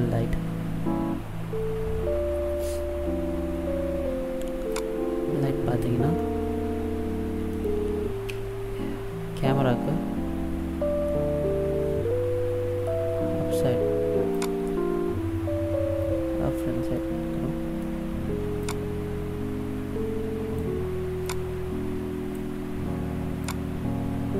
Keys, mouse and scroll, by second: 4.8 click, 6.3 middle click, 8.5 KP_0, 9.9-11.2 scroll down 2, 11.2 middle click, 14.5 click, 17.1 middle click, 18.8 click, 21.4 click, 23.6 click.